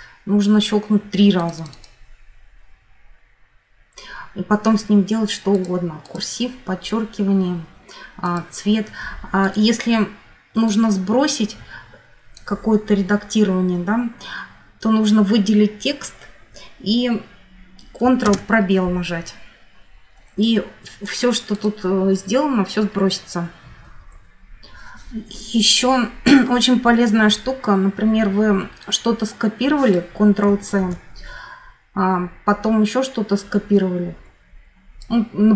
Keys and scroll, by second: 18.2 ctrl+space, 23.8 F9, 30.5 ctrl+c.